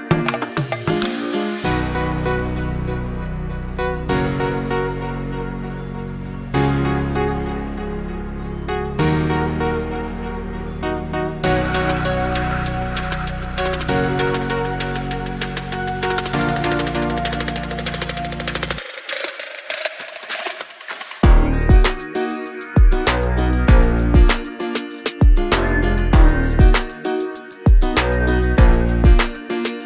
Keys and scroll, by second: 12.8 ctrl+t.